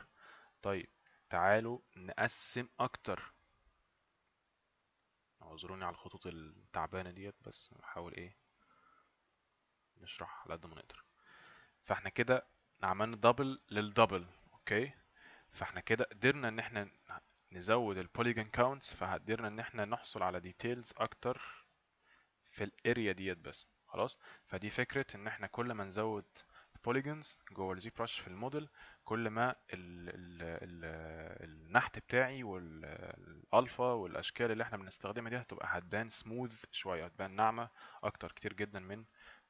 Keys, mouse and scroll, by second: 1.1 click.